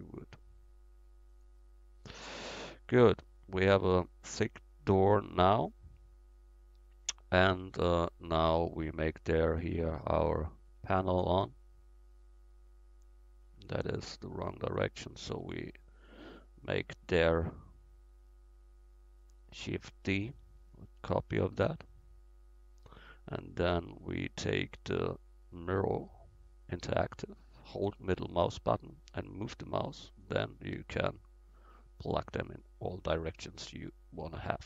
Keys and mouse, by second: 1.3-4.0 drag, 2.2-4.0 right drag, 4.0-8.2 middle drag, 9.0-11.0 right drag, 9.8-11.4 drag, 10.7-11.0 middle drag, 11.4-11.7 right drag, 11.7-14.4 middle drag, 14.4-16.4 drag, 17.4-20.0 drag, 18.9-21.8 middle drag, 20.9 shift+d, 21.8-23.7 drag, 30.6-33.1 middle drag, 31.8-33.4 drag, 33.4 middle click, 33.6 click, 33.9-34.6 middle drag.